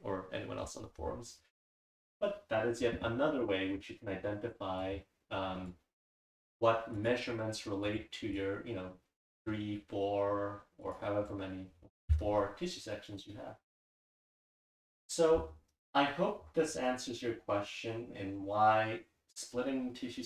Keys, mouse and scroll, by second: 8.4-9.4 drag.